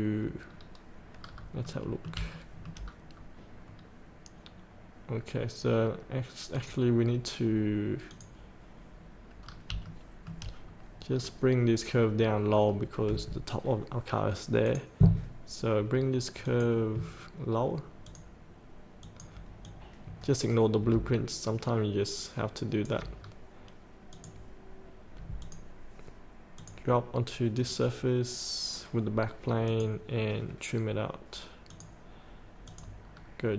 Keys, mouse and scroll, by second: 0.5 scroll down 1, 1.1 scroll up 1, 1.6 middle click, 2.4 shift+middle click, 3.7 scroll down 1, 6.5 click, 9.4-9.7 scroll up 1, 9.8 shift+middle click, 10.6 scroll down 1, 11.3 scroll down 1, 12.6 scroll up 1, 14.6 click, 18.0 ctrl+click, 19.0 ctrl+click, 19.6 click, 20.9-23.2 drag, 23.2 scroll up 1, 24.1 click, 25.8 click, 33.1 scroll up 1.